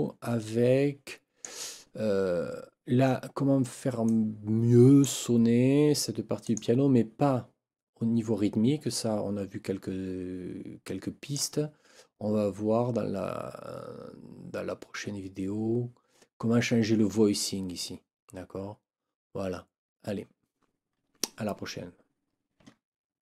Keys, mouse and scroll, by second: 4.1 click, 6.4 click, 8.9-11.5 drag.